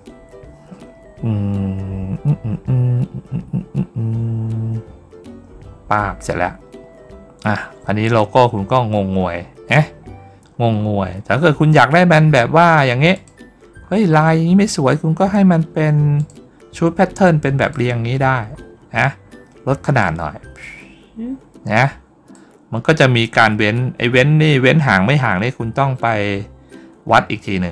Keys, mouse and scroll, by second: 6.1 middle click, 6.1 scroll down 1, 8.6 middle click, 8.8 middle click, 9.5 middle click, 10.4-11.5 middle drag, 11.5-12.0 scroll down 1, 12.3 scroll down 1, 13.0 click, 13.6-13.9 scroll up 1, 13.9 middle click, 14.3 scroll down 1, 16.0 click, 17.4 click, 18.3 scroll up 1, 18.8 scroll down 1, 19.9-22.2 drag.